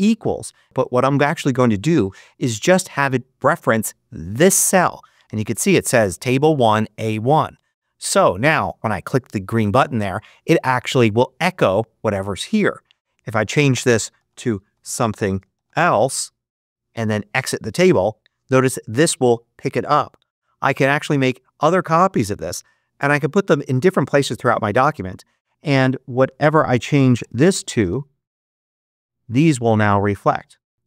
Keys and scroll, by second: 13.8-16.1 typing, 26.4-28.3 typing.